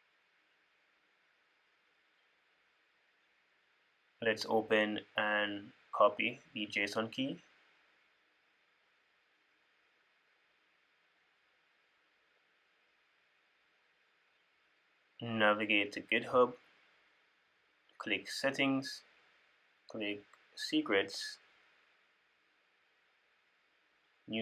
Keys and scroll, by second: 7.4 super+w, 9.2 super+w.